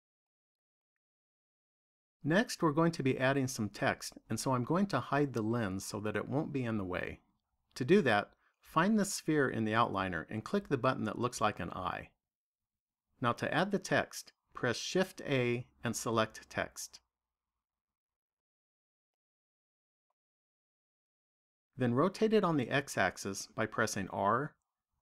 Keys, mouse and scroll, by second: 2.1 click, 8.3 click, 10.6 click, 15.0 shift+a, 19.7 middle click, 23.9 r.